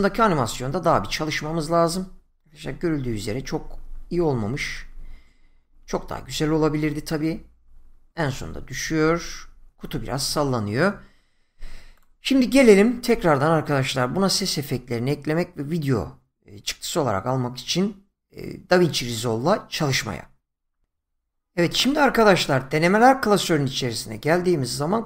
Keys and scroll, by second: 0.7 Right.